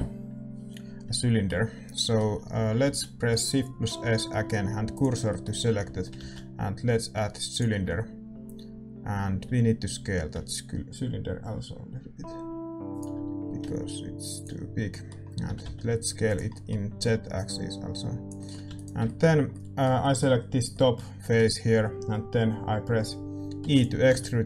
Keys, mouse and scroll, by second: 4.9 shift+s, 5.2-7.5 middle drag, 5.6 a, 7.5 shift+a, 7.8-12.6 middle drag, 9.4 s, 13.2 s, 14.8 middle click, 15.5 s, 17.3-19.0 drag, 17.3-23.6 middle drag, 18.3 s, 18.6 a, 18.7-20.7 right drag, 23.6 e, 24.0 s.